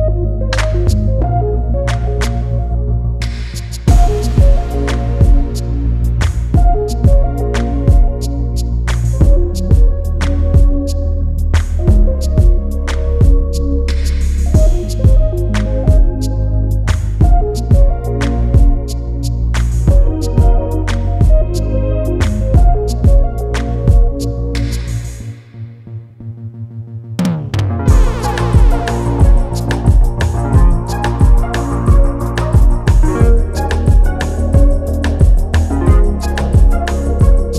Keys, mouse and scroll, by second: 0.2 c, 1.0 scroll down 1, 2.0 click, 3.1 ctrl+g, 3.6 ctrl+shift+e, 7.2 click, 7.9 ctrl+s, 10.6 click, 12.0 click, 14.7-15.1 scroll down 1, 15.1 click, 16.2 click, 21.3 scroll up 1, 21.8 click, 25.7 click, 27.5 click, 29.4-30.0 scroll down 1, 30.0 click, 34.4 click.